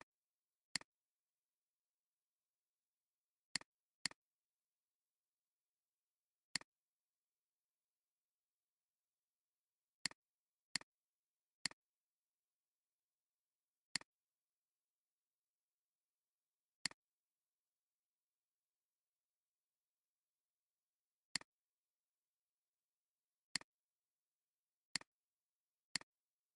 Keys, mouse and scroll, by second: 4.0 double click, 6.5 right click, 12.6 alt+scroll up 1, 13.9 alt+shift+click.